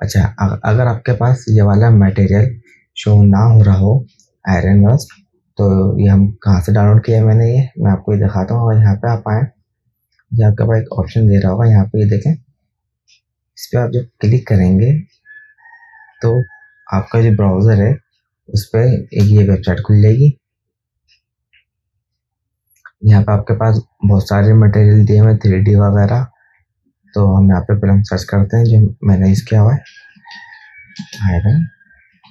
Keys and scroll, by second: 11.0 KP_2, 14.9 KP_1, 30.4-32.3 typing.